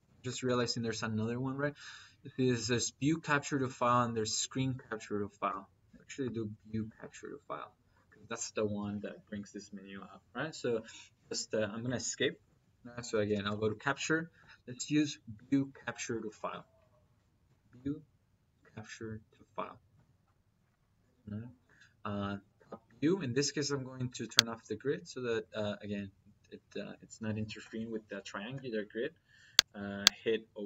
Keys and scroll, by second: 0.0-0.9 typing, 1.4 Down, 3.7 Down, 5.3 Up, 6.7 Return, 7.0 \, 12.0 Escape, 12.9-13.9 typing, 14.2 Down, 19.8 Return.